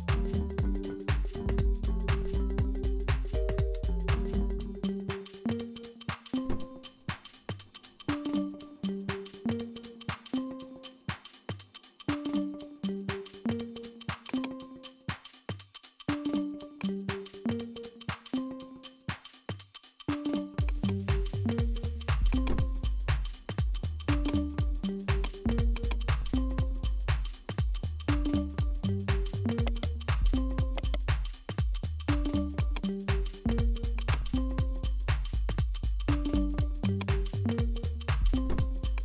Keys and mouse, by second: 6.3-10.1 middle drag, 12.6 click, 14.6-16.8 drag, 22.6 click, 24.1-26.7 drag, 28.2-29.9 drag, 29.9 right click, 31.0 right click, 32.3 shift+d, 34.0-36.5 drag, 36.9 click.